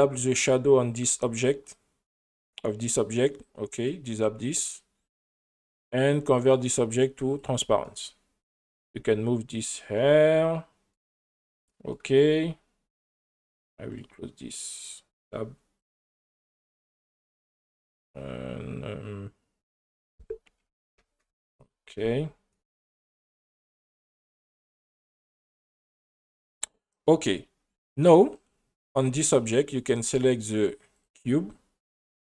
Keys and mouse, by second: 1.0 drag, 3.8 click, 4.7 click, 5.5 click, 6.4 click, 7.3 click, 7.8-8.1 middle drag, 8.9 g, 9.7 drag, 10.6 middle click, 13.0 click, 15.8 click, 19.8-21.3 drag, 21.0 KP_0, 24.1-24.5 shift+middle drag, 25.9 click, 28.4 right click, 29.7 click, 31.9 click.